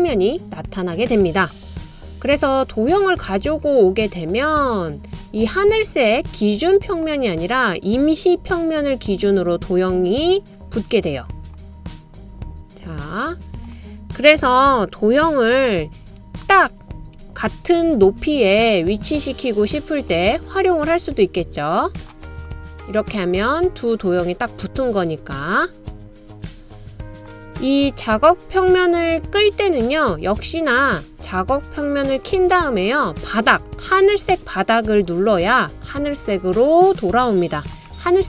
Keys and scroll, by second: 16.3 BackSpace, 18.0 BackSpace, 19.6 typing, 24.5 typing, 25.6 typing, 26.8 typing.